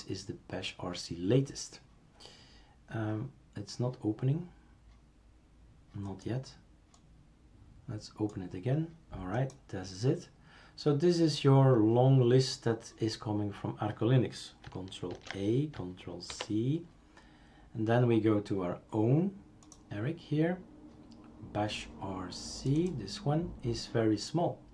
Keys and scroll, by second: 15.1 ctrl+a, 16.3 ctrl+c.